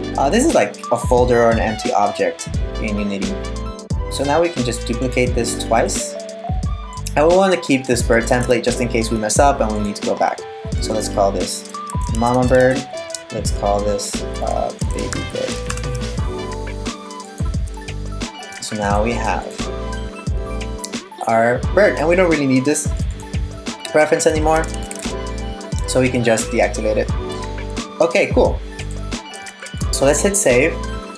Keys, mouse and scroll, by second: 3.7 right click, 5.4 right click, 7.7 click, 9.4 click, 10.4 click, 10.5 click, 13.1 click, 13.3 click, 16.8 click, 18.2 click, 18.4 click, 18.8 click, 19.0 click, 22.6 click, 22.7 click, 24.3 e, 25.8 click, 29.1 super+s.